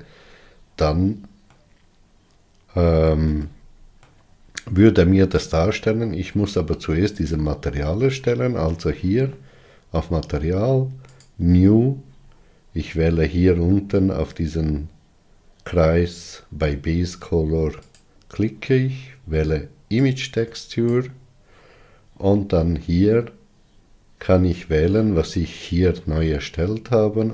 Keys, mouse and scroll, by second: 1.7-11.5 middle drag, 11.5-21.3 drag.